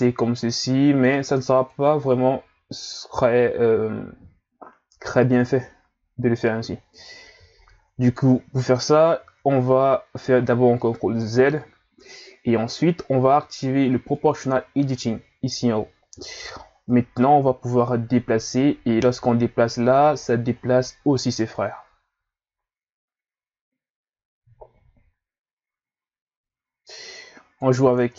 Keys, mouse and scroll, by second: 7.6 shift+scroll up 1, 9.2 ctrl+z, 14.1 click, 16.3-16.9 scroll up 1, 16.9 click, 28.0 Tab.